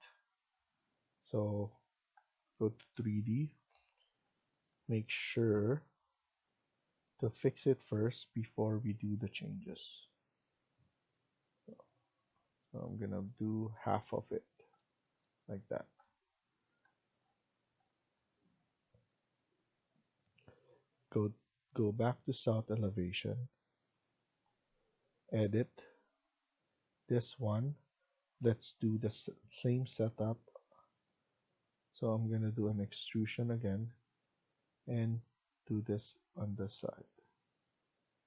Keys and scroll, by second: 13.6 Escape, 37.5 Escape.